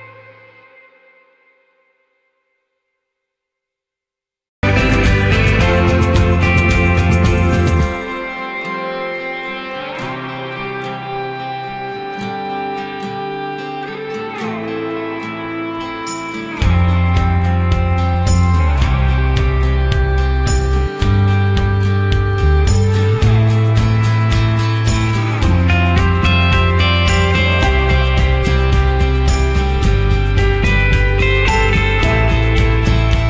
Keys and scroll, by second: 20.4 ctrl+z.